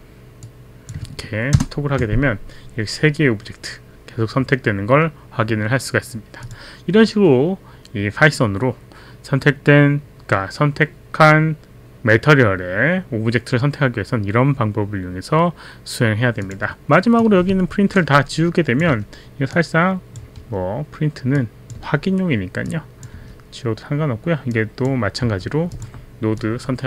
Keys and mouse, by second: 0.4 click, 1.5 ctrl+Return, 6.4 click, 16.4 click, 17.2 click, 18.9 Delete, 19.6 click, 20.3 Delete, 21.3 click, 21.7 Delete, 21.7 click, 22.6 Delete, 22.6 click, 23.2 Delete, 23.2 click, 24.5 click, 25.2 Delete, 25.7 click, 26.4 click.